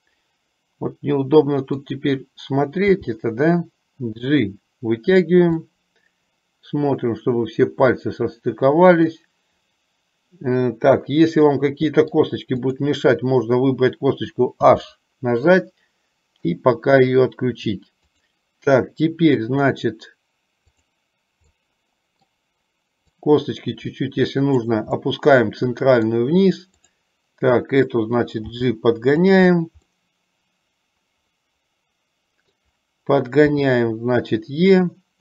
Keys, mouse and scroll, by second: 3.0 g, 5.6-12.5 middle drag, 12.9 click, 14.9 h, 15.6-16.7 middle drag, 18.2 click, 21.7 middle click, 23.4-24.7 drag, 25.2-26.4 middle drag, 26.9 click, 28.6 g, 30.1-32.9 middle drag.